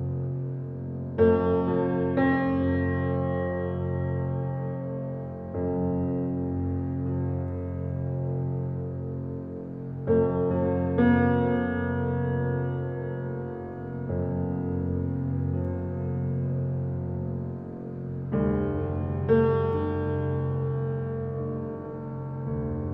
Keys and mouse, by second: 1.4 typing, 3.1-4.7 drag, 4.9 typing, 6.8 click, 7.6 alt+a, 8.5-12.6 alt+drag, 9.1 typing, 12.7-13.7 typing, 14.2 middle click, 14.4 click, 15.9 alt+click, 17.0 typing, 18.8 click, 19.4 Tab, 19.9-21.6 alt+drag, 21.9 alt+click, 22.2 click.